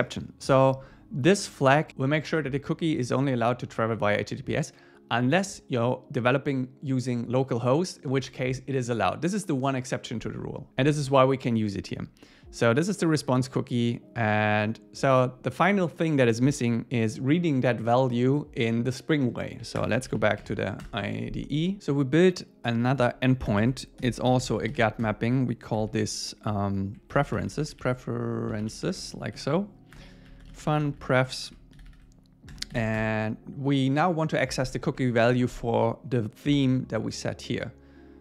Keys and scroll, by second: 20.8 Return, 23.5 Return, 24.0 alt+l, 25.1 Return, 29.4 Right, 30.0 Return, 32.7 alt+8, 33.0 Return, 35.0 Up.